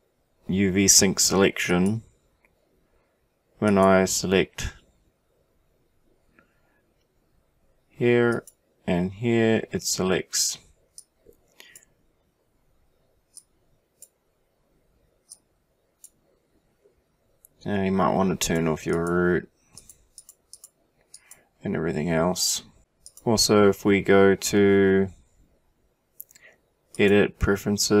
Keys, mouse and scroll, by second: 3.0 click, 3.7 click, 8.3-9.8 drag, 11.0 click, 13.8-16.5 drag, 18.4 right click, 18.5 click, 18.9 click, 19.8 click, 20.2 click, 20.6 click.